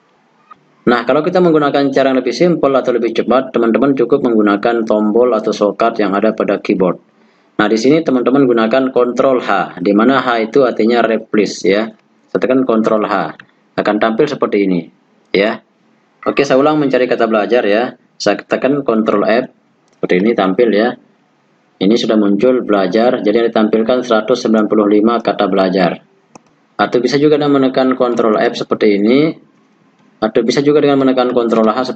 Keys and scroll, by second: 12.7 ctrl+h, 18.6 ctrl+f, 31.6 ctrl+h.